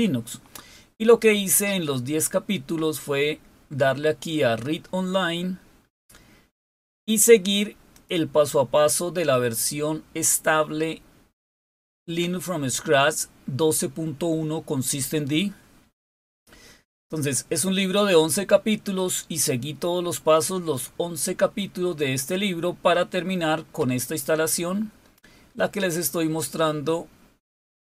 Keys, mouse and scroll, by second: 5.1-7.0 scroll down 4, 7.6 click, 15.7-19.9 scroll down 9, 20.6 scroll down 3, 21.3-22.1 scroll down 6, 22.6 scroll down 2, 23.3 scroll down 1.